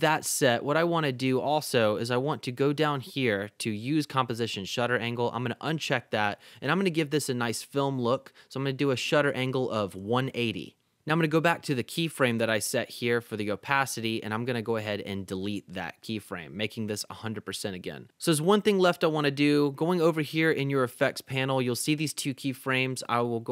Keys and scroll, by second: 9.0-10.1 typing, 15.4 BackSpace.